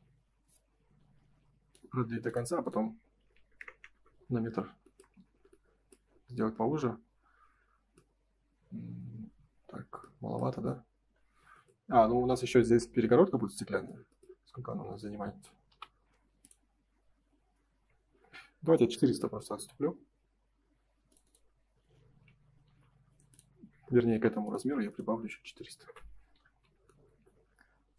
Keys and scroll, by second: 3.9 Return, 4.9 space, 5.1 Escape, 12.6 ctrl+s, 18.1 Escape, 18.9 space, 22.6 Escape, 24.1 p, 25.7 Return, 26.4 space, 26.6 Escape.